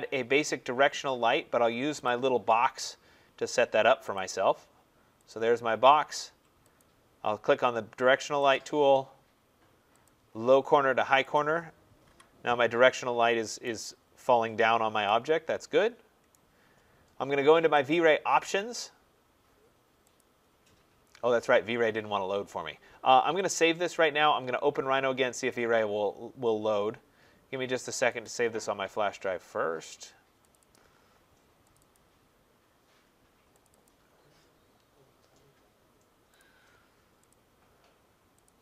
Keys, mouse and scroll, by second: 1.9 click, 2.7 click, 4.0 click, 5.2 click, 11.9 Delete, 13.5 right click, 13.7-14.2 scroll, 16.2 right click, 17.8 click, 20.0 click, 23.4 click, 25.4 click, 30.6 click, 31.6 click, 31.8 click, 33.5 click, 33.7 click, 36.3 click, 37.2 click, 38.3 click.